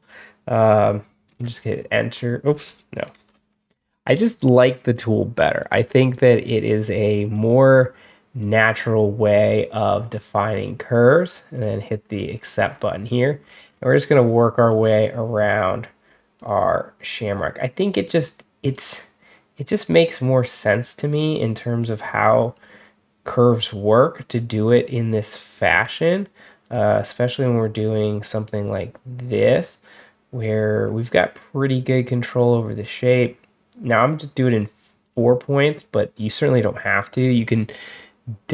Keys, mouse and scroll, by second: 3.0 ctrl+z, 4.2 click, 5.5 click, 6.0 click, 7.1 click, 8.3 click, 9.2 click, 10.4 click, 11.4 click, 12.0-12.8 scroll down 4, 12.8-13.5 scroll up 4, 13.5 scroll down 2, 14.5 click, 16.2 click, 18.5 click, 21.7 click, 22.4 click, 25.6 click, 26.5 click, 28.1 click, 33.7 click, 34.9 click, 35.6 middle click.